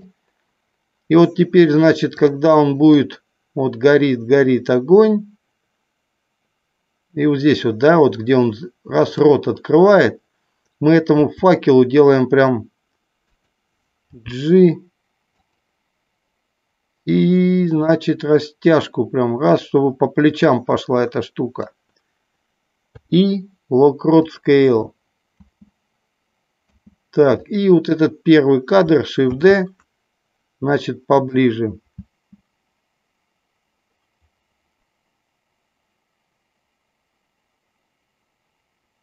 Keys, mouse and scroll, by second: 2.4 click, 3.4-9.4 drag, 11.1 s, 14.2 g, 15.6 click, 17.7-21.9 drag, 22.9 i, 25.7 space, 27.0 space, 27.7 click, 29.3 shift+d, 32.4 space.